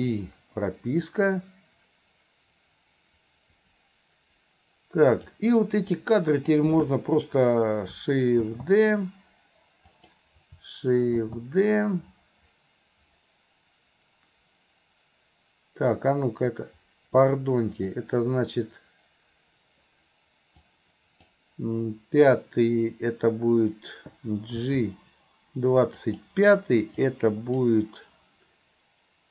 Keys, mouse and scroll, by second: 0.0 i, 1.1-5.4 drag, 5.9-6.5 drag, 20.6-21.3 drag, 24.6 g, 27.0-27.6 drag.